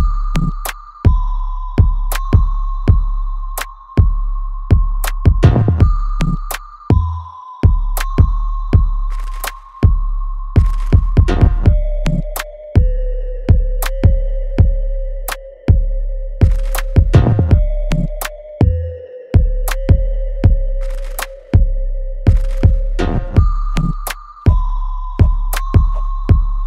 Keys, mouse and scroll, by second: 1.1 alt+right click, 1.5-2.9 alt+drag, 2.9 alt+right click, 3.4 alt+click, 4.2 alt+middle click, 4.6 alt+right click, 5.6 ctrl+s, 6.7 click, 7.1 right click, 8.6 click, 14.6 click, 18.5 click, 18.8 alt+middle click, 20.1 alt+middle click, 20.5-21.9 alt+right drag, 21.9 ctrl+s, 23.0-25.0 alt+right drag, 25.0 click.